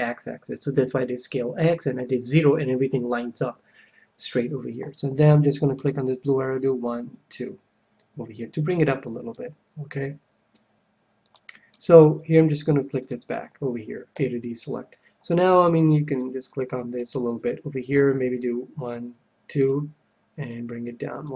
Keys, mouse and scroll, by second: 5.7-7.7 drag, 11.2-14.7 drag, 14.0 a, 15.4 c, 17.2-18.9 right drag, 18.3-20.0 drag, 20.4-21.3 drag.